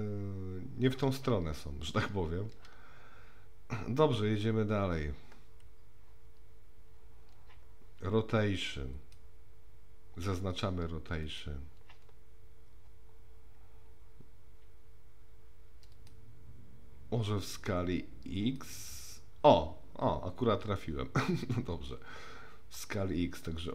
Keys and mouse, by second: 9.0 click, 11.2 click, 15.9-18.6 drag, 22.8-23.7 middle drag.